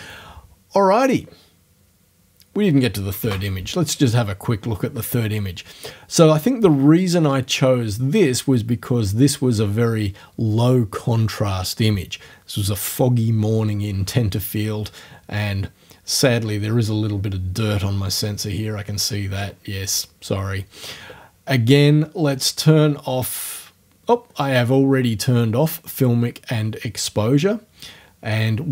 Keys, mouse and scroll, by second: 3.2 space, 16.8-17.2 scroll up 2, 19.3-19.6 scroll down 2.